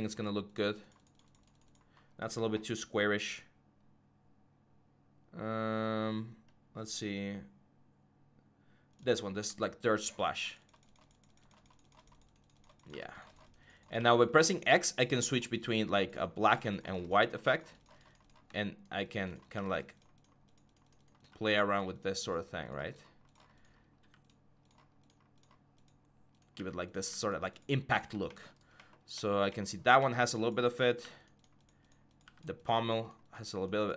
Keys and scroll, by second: 12.7 x, 19.3 x, 23.8 x, 26.3 x, 30.8 x.